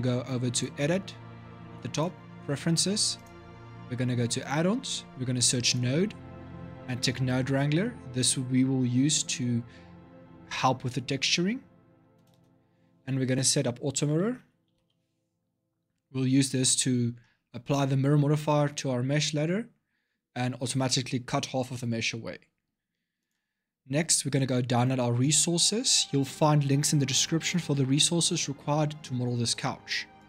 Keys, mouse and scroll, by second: 0.3-4.9 drag.